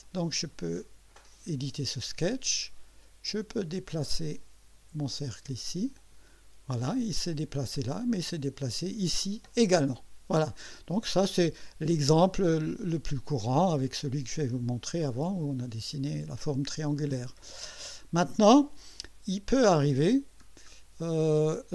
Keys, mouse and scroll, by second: 0.0 click, 1.2 click, 2.0 scroll up 1, 3.3-5.2 drag, 6.0 click, 20.5 scroll down 1, 21.0-21.7 drag.